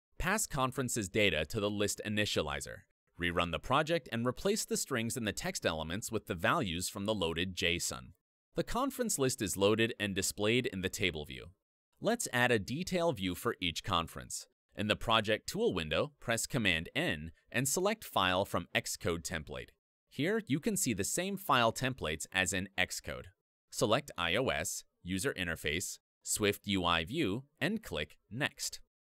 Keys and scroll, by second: 1.5 Return, 3.7 Escape, 4.9 ctrl+r, 6.8 alt+Up, 7.4 Return, 8.5 alt+Up, 11.1 Return, 17.2 super+n, 28.5 super+a.